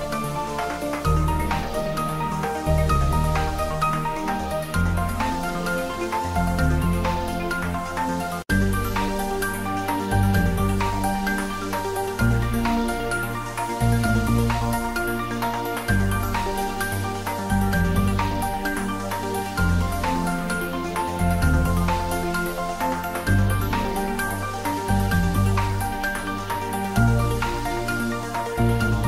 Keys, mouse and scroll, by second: 1.1 click, 1.8-2.8 typing, 4.0 click, 4.0-5.0 typing, 5.2 click, 6.1 ctrl+s, 6.4 ctrl+middle click, 7.5 shift+middle click, 7.9-10.0 typing, 9.1 click, 10.3 Down, 10.8 Return, 11.1-12.0 typing, 12.1 click, 12.3 ctrl+s, 12.6-13.9 ctrl+middle drag, 14.4-15.6 shift+middle drag, 15.6 click, 16.5 Tab, 18.1 middle click, 18.5-22.9 ctrl+middle drag, 24.0 click, 24.3 e, 24.8 click, 25.2-26.4 ctrl+middle drag, 26.4 click, 27.2 ctrl+middle click, 28.0 shift+middle click, 28.9 ctrl+middle click.